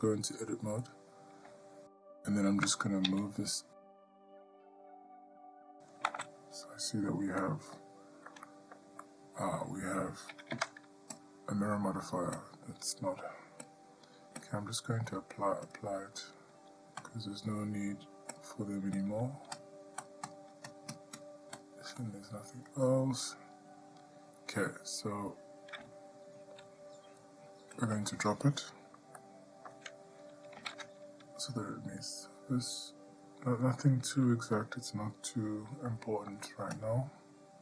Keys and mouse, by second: 3.3 g, 7.6 middle click, 8.7 ctrl+middle click, 9.3 middle click, 10.7 Tab, 11.4 click, 12.6 click, 14.0-14.7 drag, 15.9 click, 17.3 click, 18.6-19.2 drag, 19.8 click, 20.5 click, 21.1 click, 21.4 click, 22.3-23.1 drag, 28.0 click, 29.4-29.9 shift+middle drag, 30.8 g, 36.1-36.5 shift+middle drag.